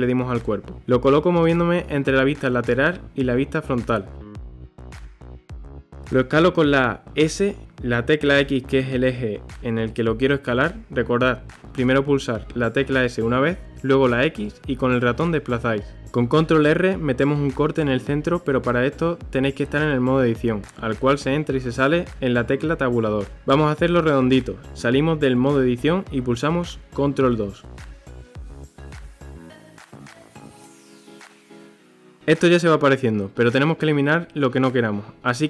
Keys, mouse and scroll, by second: 3.5 g, 7.7 Tab, 9.0-10.4 scroll up 1, 10.4 s, 17.6 ctrl+r, 19.9 shift+middle click, 20.3-20.8 scroll up 1, 20.8-21.3 scroll up 1, 21.3-23.9 shift+middle drag, 23.9 Tab, 26.3 ctrl+2, 27.8 Tab, 28.0 a, 28.3 s, 29.4-30.5 middle drag, 30.7 ctrl+r, 32.2-34.3 middle drag, 34.3 KP_3, 34.9 click.